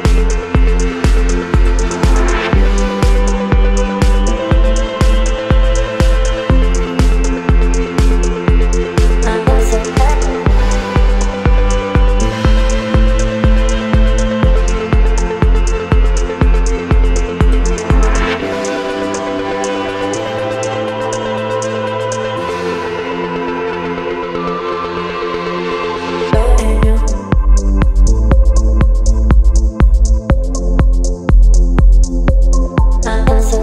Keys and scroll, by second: 7.6 space, 23.1 space.